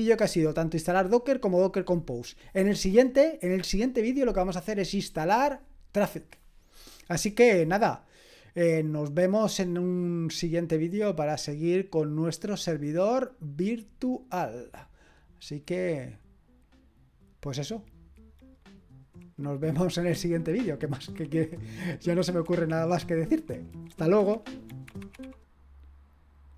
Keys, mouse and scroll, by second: 10.8 click, 11.3-15.2 drag, 26.5 click.